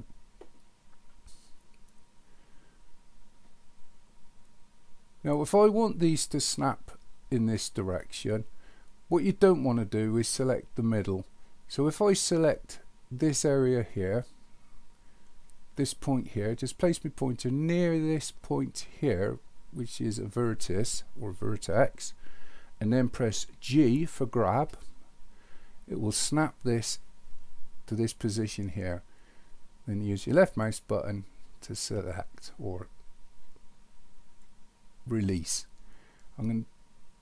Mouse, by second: 34.5-37.2 drag.